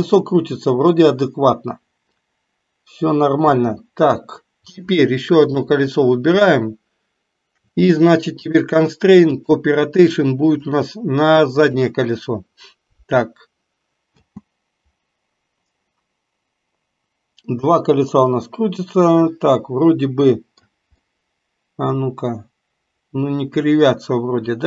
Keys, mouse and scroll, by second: 3.6 space, 5.5 click, 8.4-9.6 drag, 10.5 click, 14.1 space, 19.5-20.8 middle drag, 21.1-24.6 middle drag.